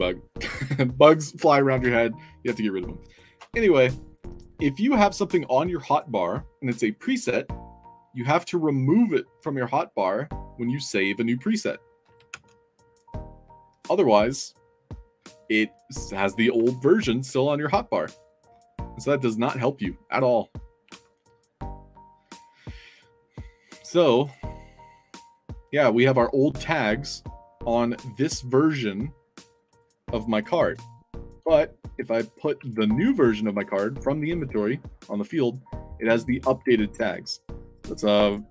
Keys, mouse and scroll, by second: 12.2 alt+Tab, 15.4 alt+click, 18.5 click, 20.8 alt+Tab, 24.1 alt+click, 32.0 click, 33.8 i, 34.2 click, 38.1 drag.